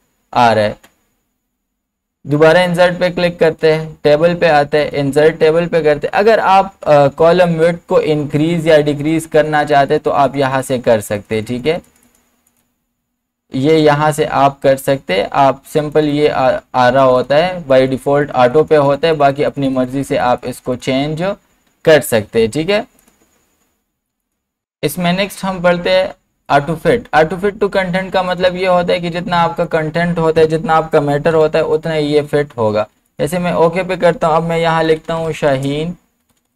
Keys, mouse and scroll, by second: 0.0 ctrl+z, 2.4 click, 8.4 click, 15.1 click, 30.4 BackSpace, 33.1 click, 34.6-36.5 typing.